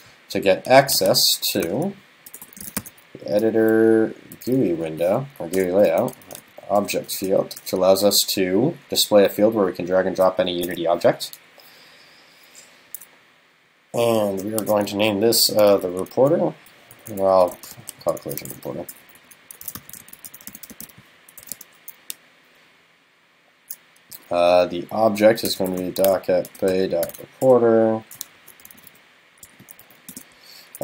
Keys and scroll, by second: 28.4 alt+shift+Left.